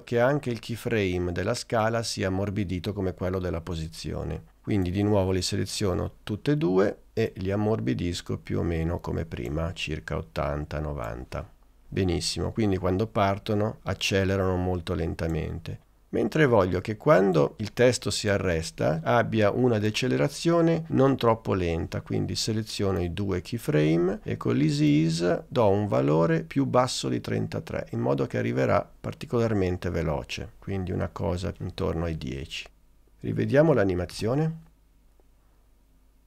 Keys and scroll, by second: 34.2 space.